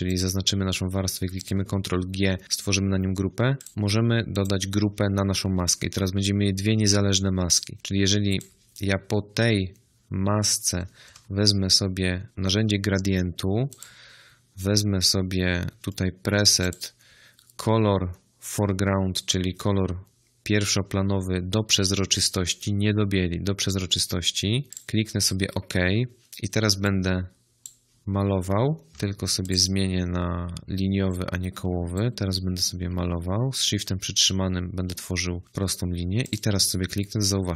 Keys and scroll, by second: 11.0 g, 28.9 ctrl+z.